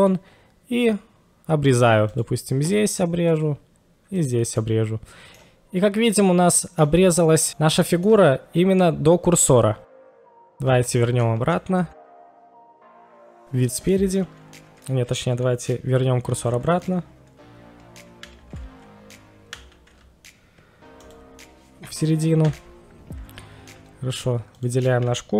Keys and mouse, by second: 3.3 click, 4.2 click, 4.6-5.4 middle drag, 6.5-6.9 middle drag, 7.6-9.9 middle drag, 10.2-10.8 middle drag, 10.8 ctrl+z, 11.0 ctrl+z, 11.8 ctrl+z, 11.9 ctrl+z, 12.2 ctrl+z, 12.6 ctrl+z, 12.6 right click, 12.9 ctrl+z, 13.0 ctrl+z, 13.3 ctrl+z, 13.3 KP_1, 14.1-14.8 middle drag, 18.3 shift+a, 19.7 shift+s, 22.5 KP_1, 24.5 click.